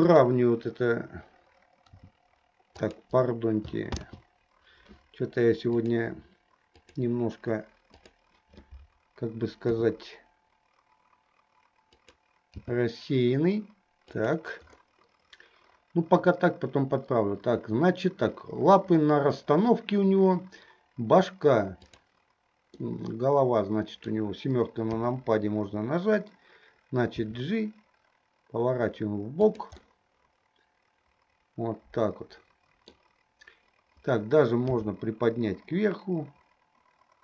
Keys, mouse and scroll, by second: 0.1 click, 1.9 r, 4.2 ctrl+z, 5.8-7.2 drag, 8.3 click, 9.9 r, 12.9 g, 21.9 click, 23.2-24.3 middle drag, 25.1 KP_7, 27.2 g, 29.9-33.3 middle drag, 34.8 g.